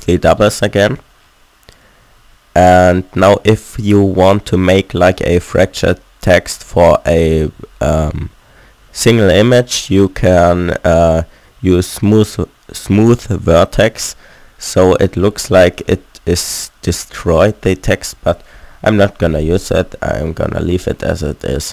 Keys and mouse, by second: 2.0 a, 2.3 a, 4.0 Tab, 9.3 middle click, 10.1 Tab, 12.2-14.6 drag, 14.6 middle click, 15.4 Tab, 18.5-19.9 middle drag, 18.9 ctrl+z.